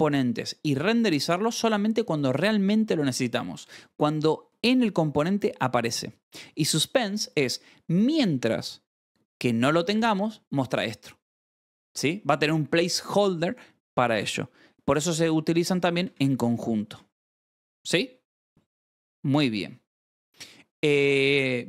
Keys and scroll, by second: 14.9-16.6 typing, 16.9 ctrl+s, 18.1 o, 20.7 BackSpace.